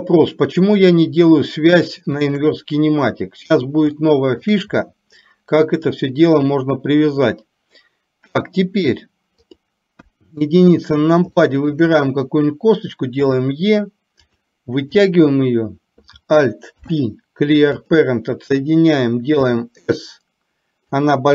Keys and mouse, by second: 0.9 click, 2.3 shift+click, 4.1 shift+middle click, 9.6 click, 10.1 KP_1, 11.4 shift+middle click, 13.3 e, 16.8 alt+p, 19.6 s.